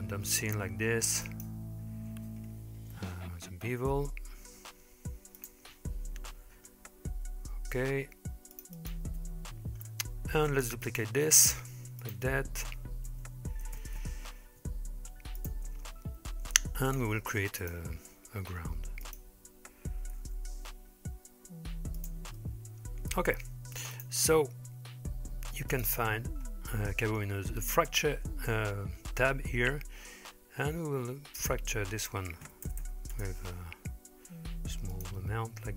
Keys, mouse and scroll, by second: 3.0 ctrl+b, 6.3 ctrl+r, 9.2 Tab, 9.8-10.6 scroll down 2, 10.9 shift+d, 12.7 r, 15.4 shift+click, 16.5 g, 18.2 shift+a, 20.2 s, 22.4-23.2 middle drag, 23.9 click, 25.7 click, 27.9 click, 31.4-33.2 drag, 32.8 KP_0, 34.9-35.7 drag.